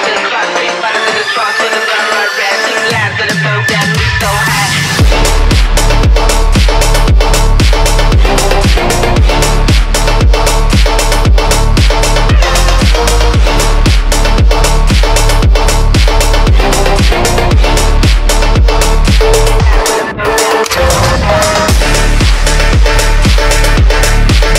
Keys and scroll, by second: 2.6 ctrl+z, 6.1 ctrl+z, 6.3 F3, 6.4 Escape, 15.8 ctrl+z.